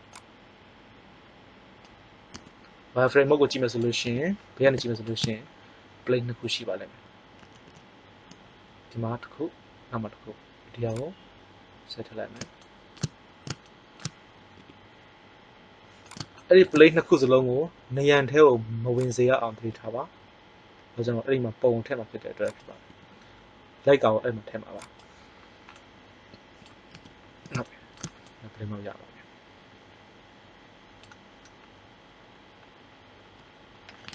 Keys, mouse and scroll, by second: 0.0 click, 2.3 z, 4.0 KP_3, 7.3 a, 7.7 a, 10.8 click, 14.5 r, 17.3 g, 19.2-20.8 drag, 19.7 r, 22.8 g, 26.9 z, 29.9 middle click.